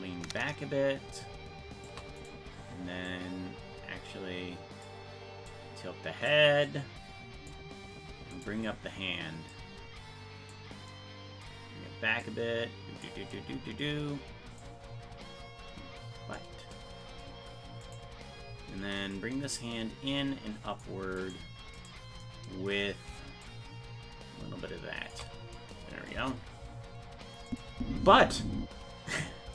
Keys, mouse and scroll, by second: 2.3 right click, 3.1-4.8 drag, 5.5 click, 6.6 click, 8.4 right click, 9.5-10.5 drag, 12.2 click, 14.6-16.4 drag, 17.9 right click, 19.1-20.8 drag, 21.2 right click, 23.4-25.1 shift+drag, 26.1 KP_0, 27.5 click, 27.7 space.